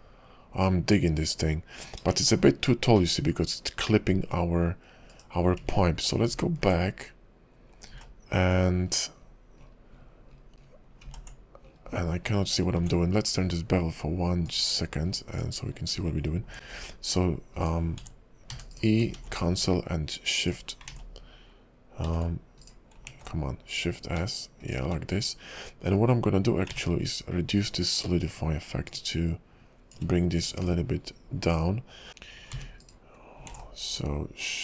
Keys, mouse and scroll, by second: 2.3 shift+middle click, 2.7 scroll up 3, 3.2 middle click, 5.2 /, 5.7 ctrl+z, 6.4 ctrl+z, 7.2-8.1 scroll up 4, 8.1 ctrl+z, 8.8-10.9 scroll down 25, 11.1 ctrl+z, 11.8-12.8 scroll up 16, 12.8 ctrl+`, 15.7-16.3 scroll up 3, 16.6 alt+s, 18.0 w, 18.5 e, 19.2 alt+x, 20.4 right click, 20.9 ctrl+z, 22.0 s, 23.1 alt+s, 26.8 ctrl+`, 32.1 ctrl+z, 32.1 middle click, 32.1-32.6 scroll up 2, 32.6 e, 33.5 alt+s.